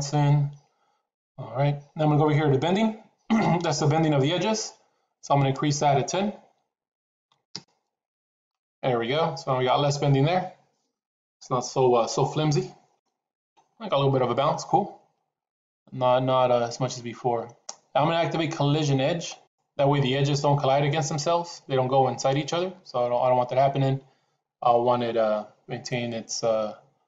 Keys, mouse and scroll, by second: 5.4-8.8 drag.